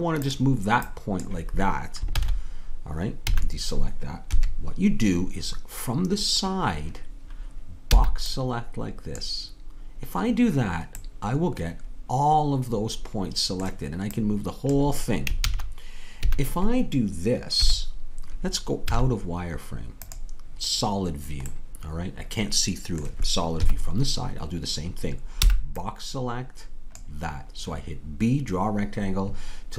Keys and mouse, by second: 0.9-2.1 drag, 2.1 ctrl+z, 3.3 a, 4.3 KP_3, 8.0 b, 14.2-16.2 drag, 15.4 ctrl+z, 16.2 a, 17.6 KP_3, 18.9 z, 21.5-23.6 middle drag, 23.6 KP_3, 25.4 b.